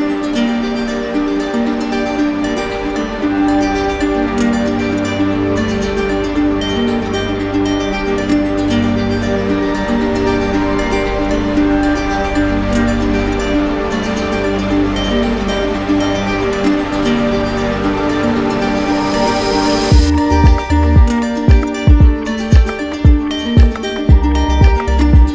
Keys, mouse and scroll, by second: 1.5 shift+click, 2.0 shift+click, 2.5 shift+click, 3.5 shift+click, 5.7 click, 6.3 click, 6.9 click, 9.3 click, 10.1 z, 11.4 click, 15.2 click, 15.4 ctrl+z, 17.9 click, 20.2 click, 20.3 ctrl+z, 22.5 click, 24.3 click, 25.2-25.3 typing.